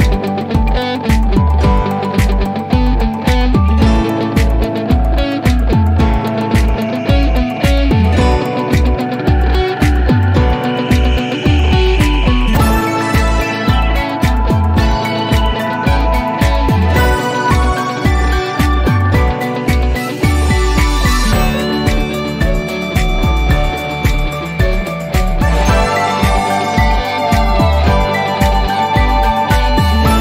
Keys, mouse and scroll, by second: 3.5 click, 5.5 click, 7.5-8.7 typing, 10.0 click, 16.5 click, 19.0 click, 23.4 click, 27.7 click.